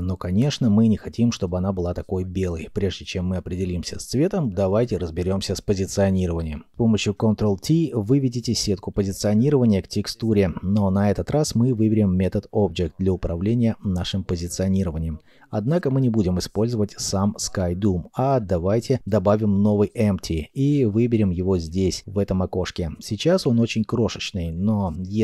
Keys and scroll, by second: 9.5 g, 15.8 shift+a.